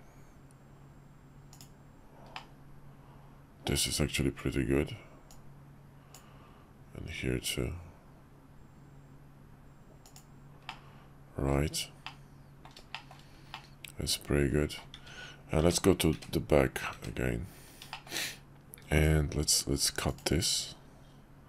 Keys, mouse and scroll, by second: 2.3-3.7 middle drag, 5.2-10.2 drag, 10.7-11.5 middle drag, 12.0-12.6 middle drag, 12.9 shift+middle click, 13.5-14.7 middle drag, 15.6 `, 16.1 `, 16.9 `, 17.9 shift+middle click, 19.0-20.2 drag.